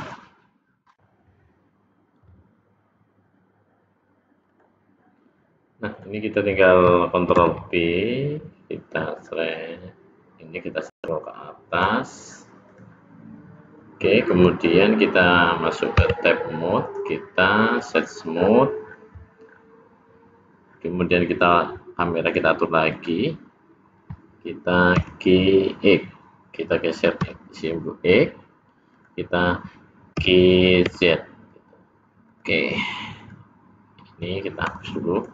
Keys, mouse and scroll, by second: 0.0 click, 4.4 click, 6.0 click, 7.5 ctrl+b, 12.6 click, 15.9 Tab, 16.7 right click, 18.4-19.0 scroll down 4, 19.4-19.8 scroll up 1, 21.4 click, 22.2 click, 22.9 click, 24.9 g, 30.1 g, 33.2 click, 34.6 x.